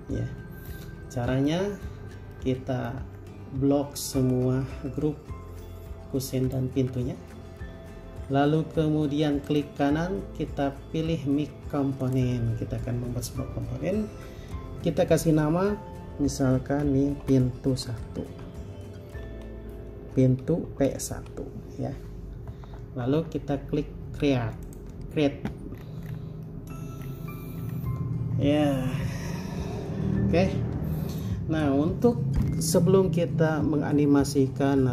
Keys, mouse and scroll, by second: 0.0 middle click, 3.4-3.7 scroll down 1, 8.4-9.7 scroll up 1, 9.7 right click, 17.3-19.4 typing, 20.9-21.3 typing, 26.0 scroll down 1, 26.6 middle click, 27.2-27.8 scroll up 1.